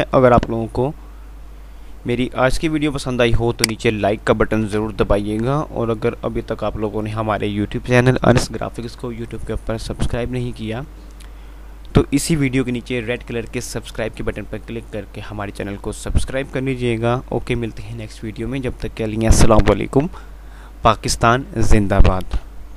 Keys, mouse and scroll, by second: 0.4 F9, 3.9 click, 4.9 F9.